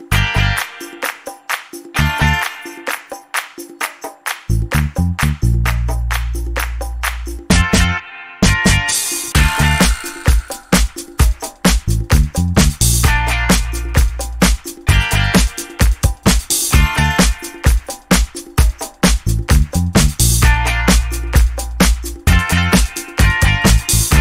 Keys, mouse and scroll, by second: 1.7 click, 3.1 click, 4.5 ctrl+shift+9, 8.9 scroll up 2, 9.1 click, 9.3 middle click, 10.4-11.0 ctrl+scroll up 3, 13.1-13.6 ctrl+scroll up 2, 14.1 ctrl+click, 15.3 ctrl+click, 15.9 ctrl+click, 16.8 ctrl+click, 19.7-24.2 drag.